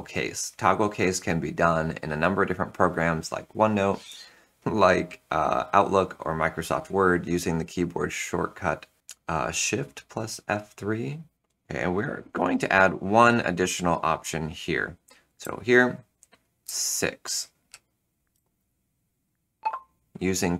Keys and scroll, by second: 15.3 Return, 16.6 6, 17.6 ., 18.2 space.